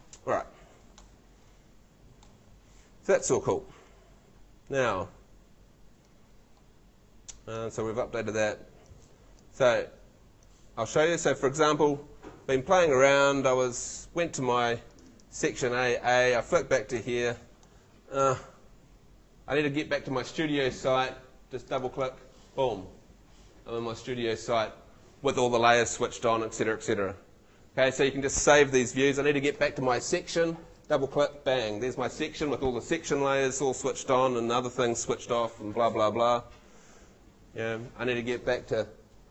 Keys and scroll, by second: 17.0 F2.